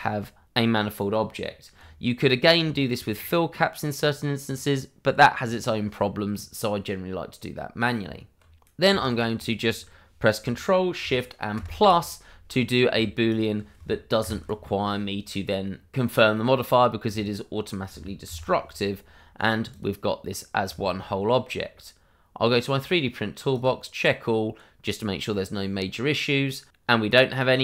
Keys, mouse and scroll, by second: 0.8 scroll down 1, 1.9 /, 2.3 scroll down 1, 2.7 shift+middle click, 7.9 Tab, 8.6 Escape, 9.0 shift+click, 11.5 ctrl+shift+KP_Add, 12.6 scroll down 1, 13.2 shift+click, 14.2 ctrl+shift+KP_Add, 16.4 scroll down 1, 17.2 shift+click, 18.2 ctrl+shift+], 18.8 scroll down 1, 19.3 click, 19.8 double click, 20.1 scroll down 1, 20.7 shift+middle click, 21.0 scroll up 1, 22.4 click.